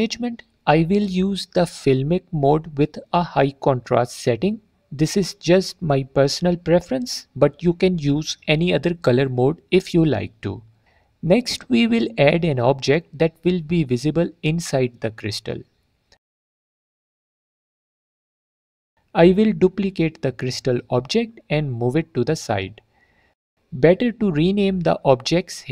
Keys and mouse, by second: 0.4-2.4 drag, 3.6-4.8 drag, 10.4 alt+middle drag, 14.5 click, 15.2-15.6 drag, 18.5 click, 20.0-20.5 drag, 21.4 shift+d, 22.5 click, 23.6 drag.